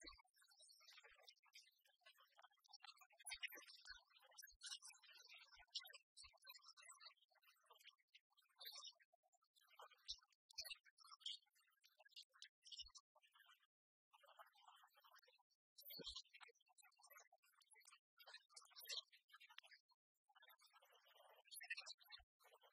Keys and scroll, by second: 2.8 ctrl+t.